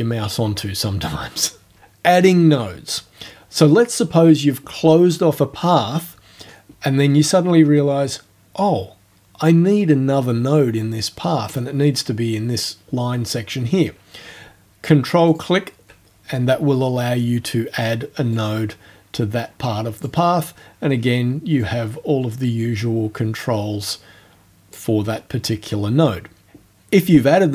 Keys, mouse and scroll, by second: 15.3 ctrl+click, 18.4-20.2 drag, 21.7-24.9 drag.